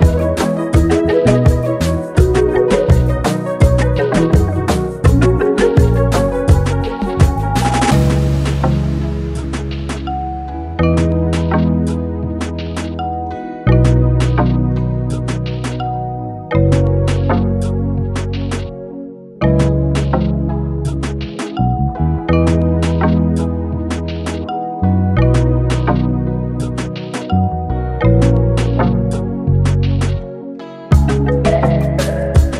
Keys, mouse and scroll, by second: 2.6 ctrl+j, 4.0 click, 5.0 ctrl+j, 9.6 shift+Right, 15.3 ctrl+g, 17.0 ctrl+space, 17.0-17.8 ctrl+click, 17.4 ctrl+space, 17.9-18.4 click, 18.2-19.0 space, 19.6-22.5 drag, 25.3 typing, 27.5 typing, 29.3-31.3 typing, 32.4-32.5 drag.